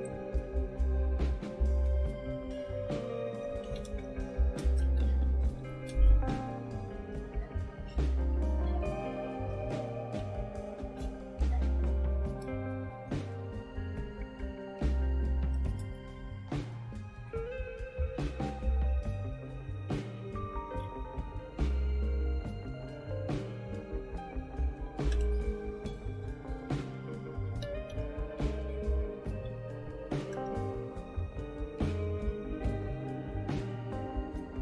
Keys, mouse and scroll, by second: 3.7-9.0 typing, 10.2-11.0 typing, 17.9 typing, 19.8-21.6 typing, 21.8 Tab, 22.3 Tab, 27.9-30.0 typing, 30.3 Return.